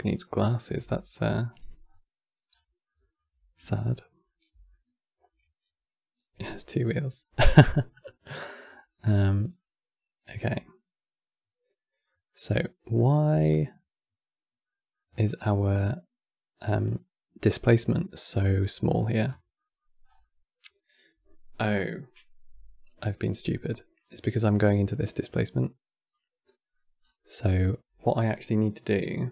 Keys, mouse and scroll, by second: 0.8-1.3 scroll down 3, 1.5-2.1 scroll down 2, 2.2 scroll down 3, 2.6-7.5 middle drag, 8.6-10.0 shift+middle drag, 10.0-10.6 scroll up 6, 11.8 middle click, 12.1-12.6 scroll up 8, 12.6-14.7 middle drag, 14.7-16.6 scroll up 8, 16.6 scroll down 2, 18.4-18.9 middle drag, 18.9-19.3 scroll down 5, 19.3-19.7 middle drag, 19.7 scroll down 1, 19.9-22.9 middle drag, 23.7 click, 25.3 click, 26.1-26.7 middle drag, 26.7 scroll down 3, 26.9-29.3 middle drag.